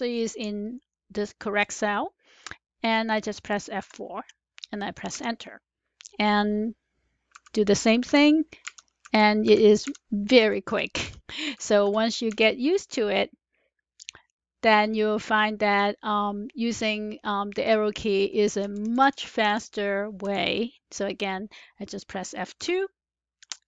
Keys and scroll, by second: 0.7 Left, 3.7 F4, 5.0 Return, 7.2 F2, 8.0 F4, 8.5 Return, 8.9 F2, 9.3 F4, 9.8 Return, 10.3 F2, 10.6 F4, 10.9 Return, 18.6 Down, 18.7 Down, 22.5 F2.